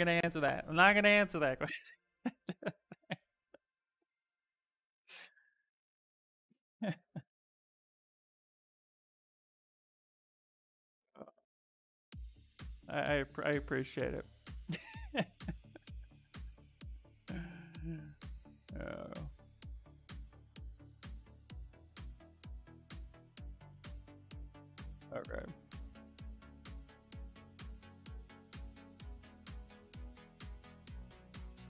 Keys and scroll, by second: 4.9 s, 7.1 s, 22.6 s.